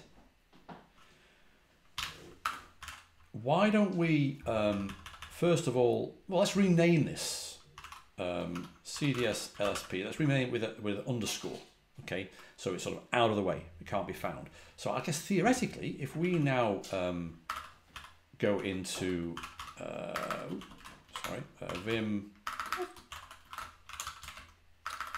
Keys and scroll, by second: 1.8-3.2 typing, 4.6-5.1 typing, 7.4-10.1 typing, 16.1 ctrl+a, 16.2 ctrl+h, 17.3 Escape, 17.4-25.1 typing, 21.1 Return.